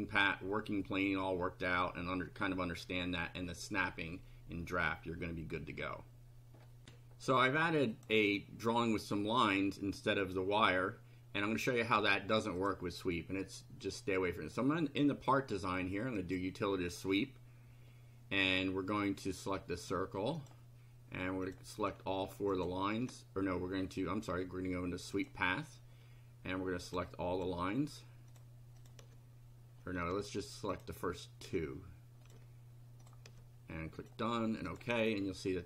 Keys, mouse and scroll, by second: 6.8 ctrl+r, 7.9 click, 12.6 click, 16.1 click, 19.8 click, 20.4 click, 21.5 click, 22.5 ctrl+click, 25.1 click, 26.9 ctrl+click, 27.4 ctrl+click, 28.3 ctrl+click, 28.8 ctrl+click, 30.7 ctrl+click, 32.2 click, 33.0 ctrl+click, 34.0 click, 34.7 click.